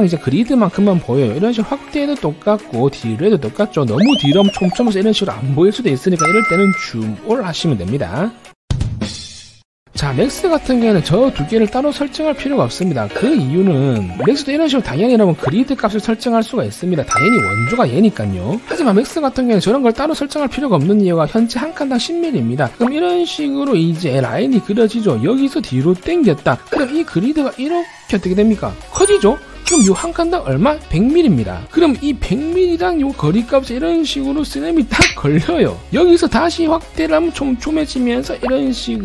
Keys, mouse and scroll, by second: 1.7-2.6 scroll up 5, 2.9-3.4 scroll down 3, 4.5 scroll down 1, 7.0 z, 7.1 right click, 7.4 a, 7.5 right click, 7.9 right click, 13.4 click, 13.8 alt+w, 15.2 click, 16.1 click, 22.9 click, 23.4 click, 23.9 click, 24.3 click, 24.8 click, 25.1 click, 25.5 middle click, 25.8 scroll up 1, 25.9-26.5 scroll down 3, 27.2-28.0 scroll down 3, 32.1 click, 32.7 click, 33.4 click, 34.0 click, 34.9 click, 35.4 click, 37.2 scroll up 1, 38.2 click, 38.8 click.